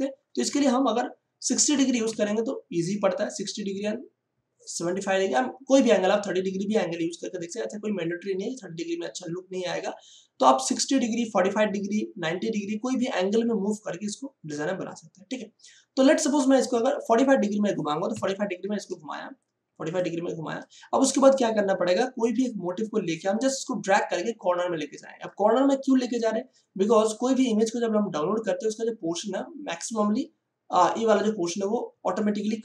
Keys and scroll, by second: 1.4 6, 2.0 0, 18.0 4, 18.2 5.